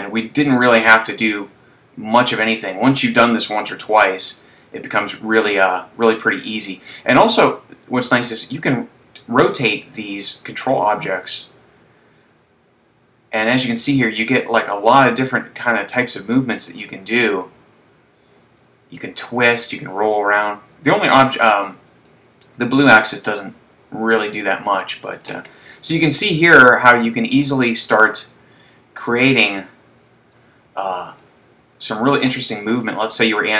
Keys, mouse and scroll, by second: 5.5-7.8 scroll up 2, 7.8 click, 17.3 click, 22.7 click, 26.8 click, 28.1 right click, 29.6 click, 31.3 click, 32.8 right click.